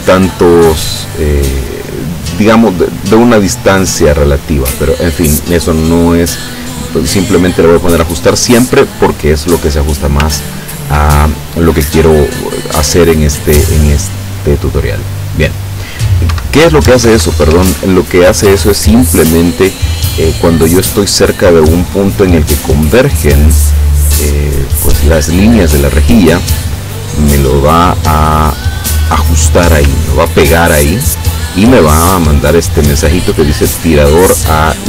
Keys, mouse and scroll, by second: 3.0 click, 4.5 click, 8.5 click, 10.6 ctrl+scroll down 2, 14.8 click, 16.4 Escape, 17.1 Escape, 28.7 click.